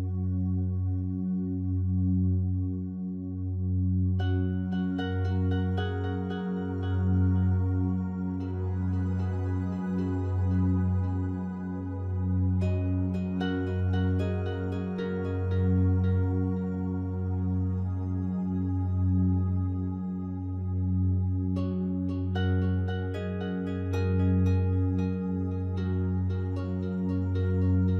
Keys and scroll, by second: 2.6 space, 10.9 space, 17.3 space, 20.1 space.